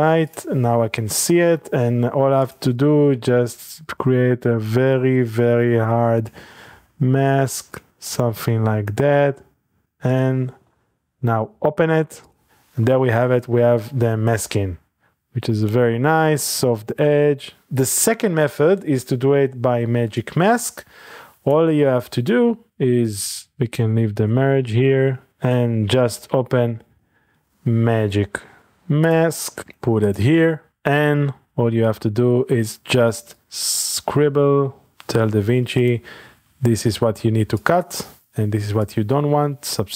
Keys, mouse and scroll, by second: 2.4 click, 3.5 click, 6.9-8.4 scroll down 1, 8.2 click, 10.5 middle click, 12.8 middle drag, 13.2 ctrl+middle click, 13.4-14.6 scroll up 2, 14.6-15.0 middle drag, 16.6-17.7 drag, 20.2-21.9 drag, 23.4-23.8 shift+drag, 24.4-24.8 shift+drag, 24.9 click, 26.0-27.8 typing, 29.0-30.4 drag, 30.5 click, 30.8 middle click, 33.4-35.0 drag, 35.8 click, 37.6 click, 38.9-39.9 drag.